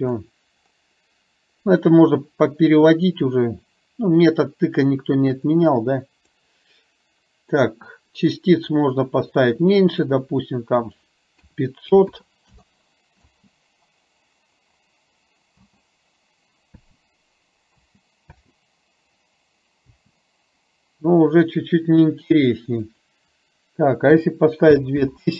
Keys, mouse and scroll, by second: 5.5 click, 8.7-10.2 drag, 10.8-12.7 drag, 12.0 KP_0, 13.3 space, 15.7 space, 17.0 space, 17.8 space, 18.5 space, 19.9 space, 22.8-25.3 drag, 25.0 KP_0.